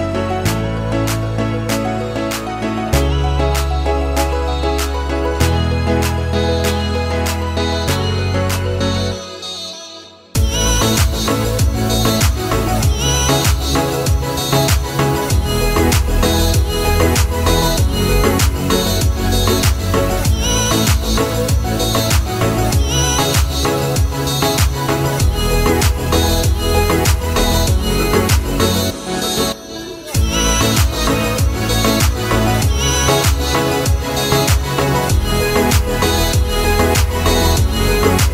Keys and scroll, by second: 35.5 Escape.